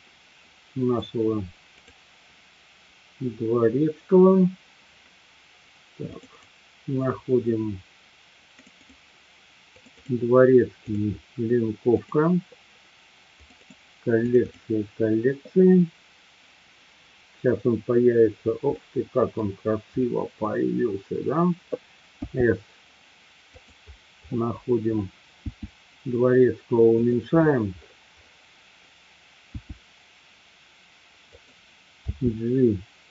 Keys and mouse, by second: 18.8-19.4 middle drag, 22.3 s, 23.5 click, 25.4 s, 27.1 click, 29.5 s, 31.4 click, 32.0 g.